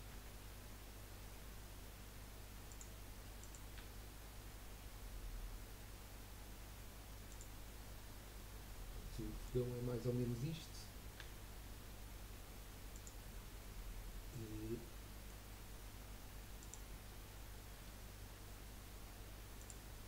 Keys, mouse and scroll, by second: 0.1 g, 3.4 click, 3.8 g, 8.3-11.1 middle drag, 11.1 g, 13.7-16.6 middle drag, 16.6 click, 17.7 g.